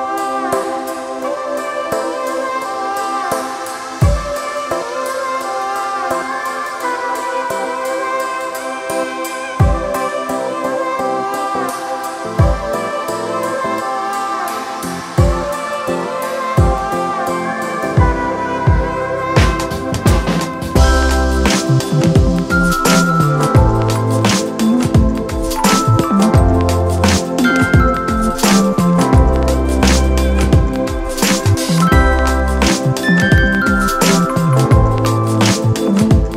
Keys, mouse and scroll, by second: 0.1 ctrl+click, 10.3 ctrl+t, 11.8 alt+shift+click.